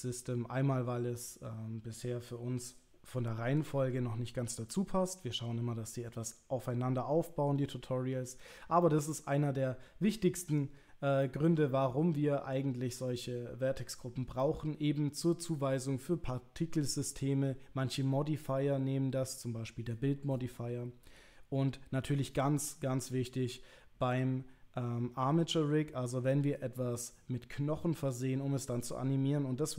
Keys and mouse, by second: 8.9-9.7 middle drag, 10.5 click, 11.3-13.0 middle drag, 14.4-15.5 middle drag.